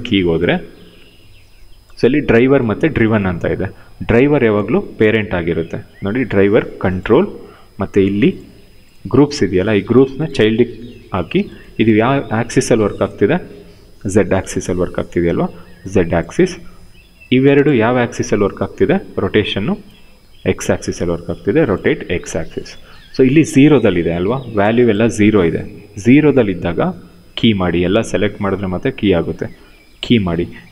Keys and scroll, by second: 11.0 w, 14.2 ctrl+z, 17.7 e, 18.6 e, 20.4 ctrl+z.